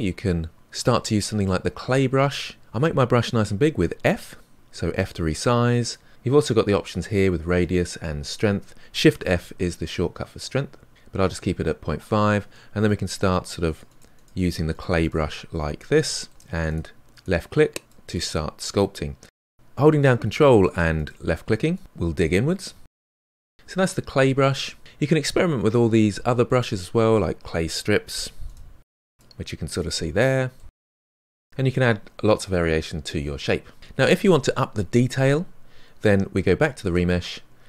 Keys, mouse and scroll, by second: 1.4-2.6 drag, 3.8 f, 9.3 shift+f, 12.2-14.7 drag, 14.7 middle click, 15.5-21.6 ctrl+drag, 21.6-23.0 middle drag, 23.0 ctrl+z, 23.2 ctrl+z, 23.3 ctrl+z, 23.5 ctrl+z, 24.3 ctrl+z, 26.6 click, 27.4 f, 27.9-29.2 drag, 29.2-30.2 middle drag, 30.2-32.0 drag, 32.0-37.6 middle drag.